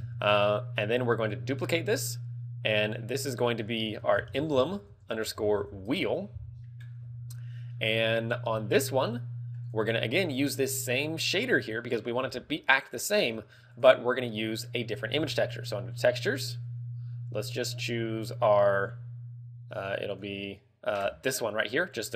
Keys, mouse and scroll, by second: 0.2 Tab, 1.7 click, 2.6 click, 3.5 click, 7.8 scroll down 4, 8.2 middle click, 8.6 scroll up 3, 9.0 middle click, 9.7 click, 13.8 click, 14.6 click.